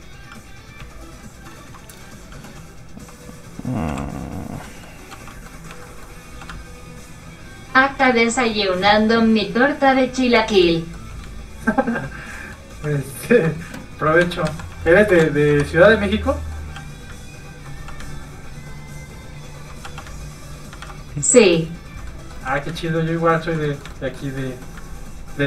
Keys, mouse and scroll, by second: 3.0 shift+h, 4.7 middle click, 5.1 f, 5.3 click, 5.7 shift+middle click, 6.0-6.5 scroll up 2, 6.3 f, 6.5 ctrl+click, 8.1 ctrl+middle click, 9.1 ctrl+click, 10.2 click, 10.3 middle click, 11.3 ctrl+click, 12.4 click, 12.5 middle click, 12.7 f, 14.2 ctrl+Tab, 14.2 ctrl+click, 14.5 a, 15.2 shift+n, 15.5 Tab, 16.3 middle click, 16.8 shift+f, 16.9 click, 17.2 ctrl+click, 17.8 click, 17.9 click, 18.3 ctrl+click, 19.9 click, 20.0 click, 20.8 ctrl+z, 22.1 click, 22.2 middle click, 22.5 f, 22.8 ctrl+click, 23.7 click, 23.8 middle click, 23.9 shift+middle click, 24.3 scroll down 1, 24.4 middle click, 24.9 ctrl+click.